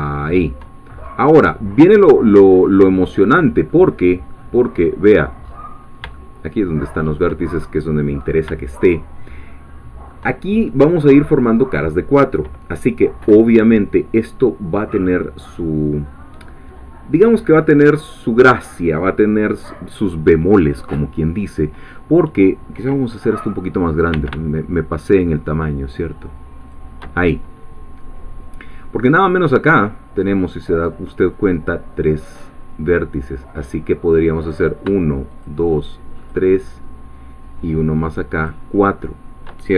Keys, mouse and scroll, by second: 0.2 shift+click, 1.0-2.4 shift+scroll up 3, 2.4 scroll down 2, 3.0 middle click, 4.4 middle click, 5.4-6.1 scroll up 5, 6.1-7.8 shift+middle drag, 8.8-10.2 shift+middle drag, 24.1 s, 26.6 shift+click, 34.4 click, 35.4 shift+click, 38.5 shift+click.